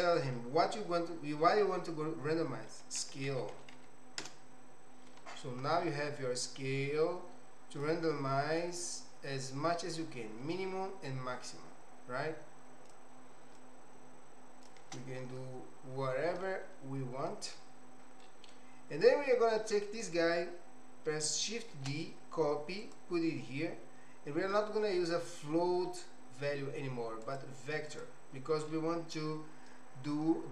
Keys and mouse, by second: 0.0-5.3 drag, 6.4-7.9 drag, 8.6-13.1 drag, 13.6-14.9 shift+drag, 16.6-17.6 middle drag, 18.2 middle click, 19.0-20.1 drag, 21.7 shift+d, 27.2 click, 28.6 middle click.